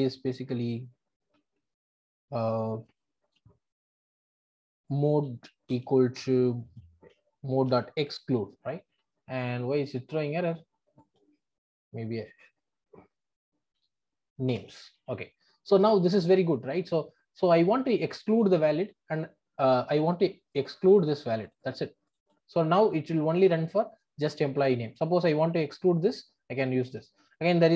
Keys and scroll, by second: 0.7 Tab, 1.9 Tab, 5.7 Return, 14.5 Return.